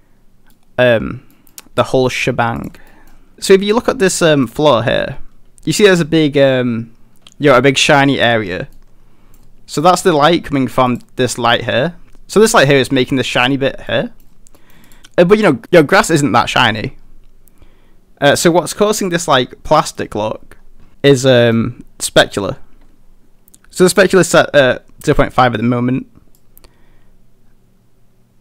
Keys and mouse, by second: 0.8 middle click, 1.3 middle drag, 1.9 middle drag, 2.6 click, 2.9 middle drag, 3.3 middle click, 3.3 g, 3.3 a, 4.1 middle click, 4.3 shift+middle drag, 8.8-9.4 middle drag, 10.9 click, 13.9-14.2 middle drag, 14.6 middle click, 14.9 click, 15.0 middle click, 19.8 middle click, 21.4 middle click, 26.4-28.4 drag.